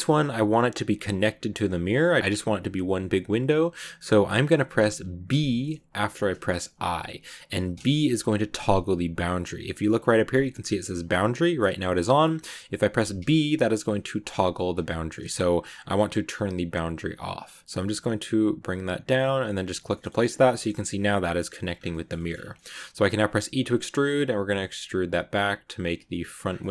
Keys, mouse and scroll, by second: 19.8 middle click, 20.0-20.3 scroll up 3, 20.3-21.6 shift+middle drag, 21.6 scroll down 1, 21.8 shift+middle click, 22.2-23.2 scroll up 3, 22.4 middle click, 23.2 e, 26.3 scroll up 1, 26.4 scroll down 2, 26.5 middle click.